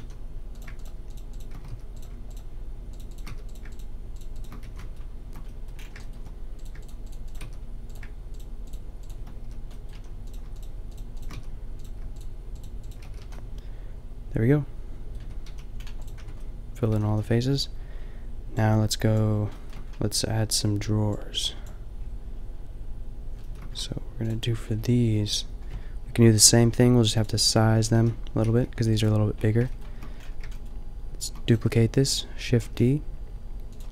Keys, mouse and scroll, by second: 0.0 a, 1.8 f, 3.3 f, 4.5 f, 4.6 a, 5.0-6.2 middle drag, 7.5 f, 9.0 right click, 9.4 f, 10.0 a, 11.4 f, 13.0 f, 13.3 a, 15.3 Tab, 15.5 a, 16.2 Tab, 17.0 a, 17.1 a, 19.7 middle click, 24.3-26.4 drag, 26.4 ctrl+l, 28.0 ctrl+l, 28.5 g, 31.2 shift+d, 32.6 g.